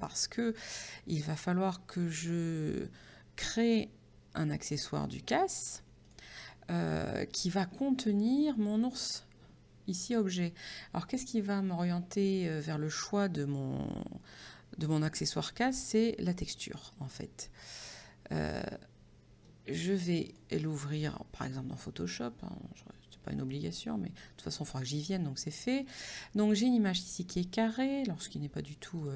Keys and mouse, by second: 1.3 click, 6.4 click, 16.6 click, 16.9 right click, 20.3 click, 29.0 click.